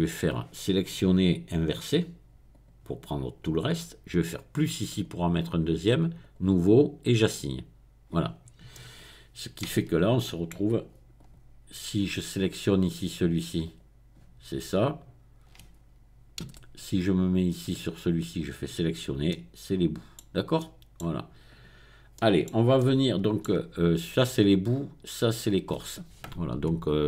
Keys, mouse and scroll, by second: 1.5 click, 2.5 click, 4.9 click, 6.2 click, 7.2 click, 8.7 middle click, 9.7-10.2 scroll down 1, 10.2 middle click, 11.2 click, 13.6 click, 16.5 a, 17.3 click, 18.3 click, 19.3-21.5 middle drag, 21.5 click.